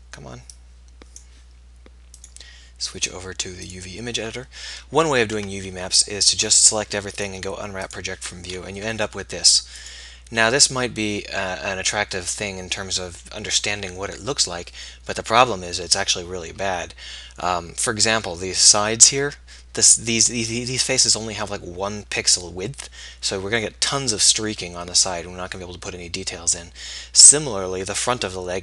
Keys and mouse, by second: 5.4 Tab, 9.0 g.